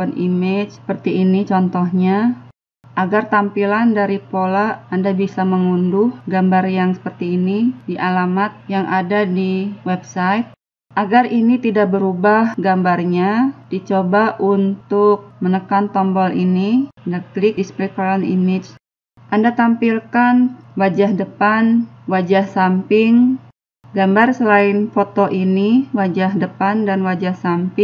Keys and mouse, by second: 0.0-1.7 drag, 1.7-3.0 middle drag, 3.0-4.9 drag, 5.2-7.1 drag, 8.4-10.4 drag, 10.4 middle click, 10.9-11.9 drag, 11.9-19.2 middle drag, 19.2 click, 20.1 click, 22.8 click, 24.4-25.7 drag, 25.8 click.